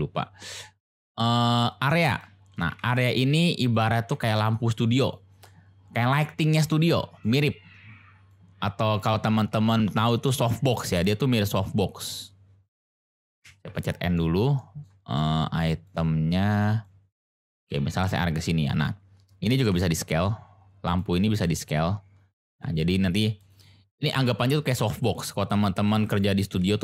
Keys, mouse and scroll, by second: 2.6 g, 2.7 z, 3.7 click, 4.1 g, 4.2 x, 5.0 click, 6.6-7.2 middle drag, 8.3-8.9 middle drag, 9.5 ctrl+z, 10.9-11.4 middle drag, 13.4 n, 13.7-14.1 middle drag, 14.5 middle click, 16.8-18.1 drag, 19.6 d, 21.0 click, 21.4 s, 22.5 click, 22.7-23.3 drag, 23.3 middle click, 23.9-24.2 middle drag, 25.8-26.2 middle drag.